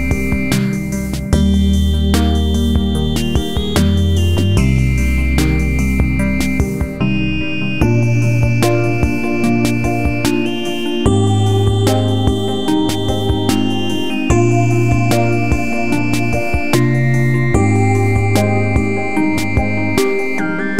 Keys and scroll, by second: 16.9 Delete.